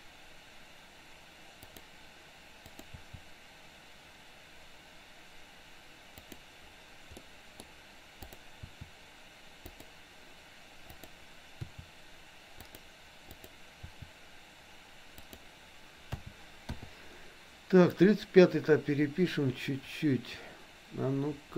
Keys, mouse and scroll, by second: 2.8 click, 3.1 r, 7.3 middle click, 7.6-8.3 scroll down 1, 8.3 click, 8.7 r, 10.8 click, 11.7 r, 13.3 click, 13.9 r, 16.2 a, 16.7 i, 18.1-21.5 drag.